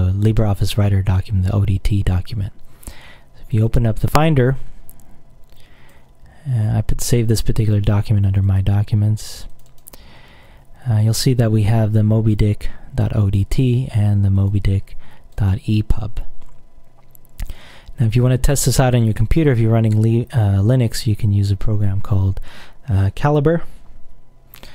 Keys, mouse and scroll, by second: 3.7 click, 5.7 click, 8.6 click, 9.7 click, 12.5 click, 13.4 click, 14.5 click, 15.5 click.